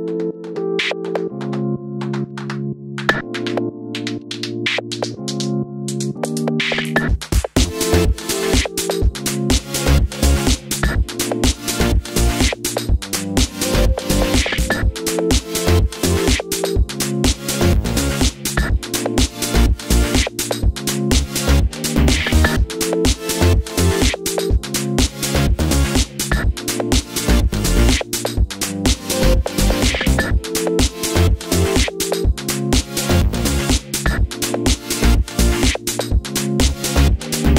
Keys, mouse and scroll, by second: 0.6 click, 2.5-5.7 right drag, 2.5 s, 3.8 o, 5.7 click, 6.0 KP_3, 6.4 scroll down 1, 7.1 scroll up 1, 7.7 middle click, 7.7 scroll up 1, 8.0 e, 8.5 s, 9.3 click, 9.3-12.4 middle drag, 10.1 KP_3, 10.8-11.2 scroll up 2, 11.2 e, 12.4-14.4 drag, 12.4 s, 14.0 e, 14.6 e, 16.1 click, 16.2 s, 17.3 e, 18.5 s, 19.6 click, 19.9-21.4 middle drag, 20.6 i, 21.4 click, 21.6-21.9 scroll down 1, 21.9 KP_3, 22.4 scroll down 1, 22.8-26.5 shift+middle drag, 23.1 e, 26.7 Tab, 26.8 click, 27.2 h, 27.4 scroll up 1, 27.8 shift+middle click, 28.7 click, 28.8 Tab, 30.5 scroll up 1, 30.7 shift+middle click, 31.1 click, 31.5 g, 32.9 click, 33.8 g, 34.8 click, 35.5-37.5 typing, 36.7 click.